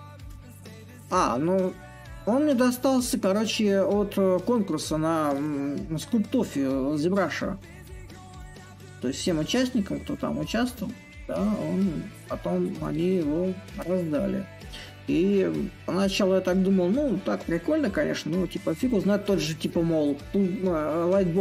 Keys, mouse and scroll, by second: 0.0-2.7 drag, 2.8-5.0 drag, 6.7-9.2 right drag, 9.2-14.2 drag, 16.4-21.4 drag.